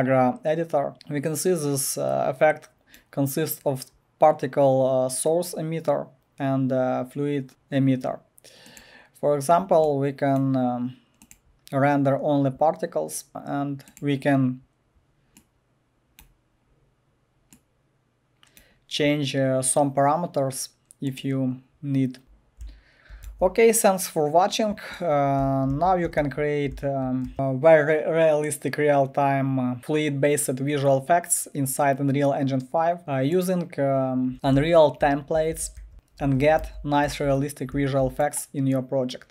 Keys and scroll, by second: 22.0-23.2 typing, 25.4-27.3 typing, 34.1-37.7 typing.